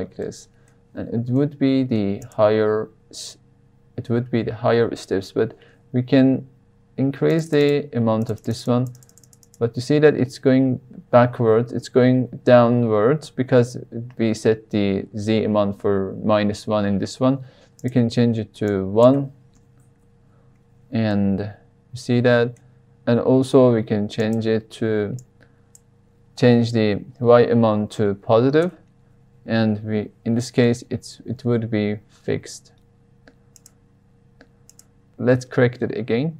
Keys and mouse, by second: 0.2-0.7 middle drag, 1.3-1.9 middle drag, 7.5 click, 7.6 click, 8.2 click, 8.4 click, 8.5 click, 8.6 click, 8.9 click, 9.2 click, 9.4 click, 17.7-20.7 drag, 21.1-22.5 middle drag, 24.2-29.3 drag, 30.5 KP_3, 32.1 g, 33.5 drag.